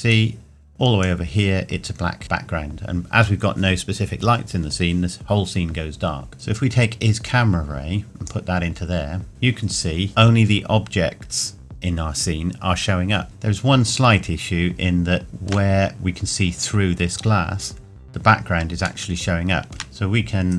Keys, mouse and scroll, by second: 6.3-6.6 scroll up 1, 10.1-11.5 scroll down 1, 13.2 shift+middle click, 15.2 shift+middle click, 15.9-16.6 scroll up 1, 18.7 scroll up 1, 19.0 shift+middle click, 19.3 shift+middle click, 19.8 click.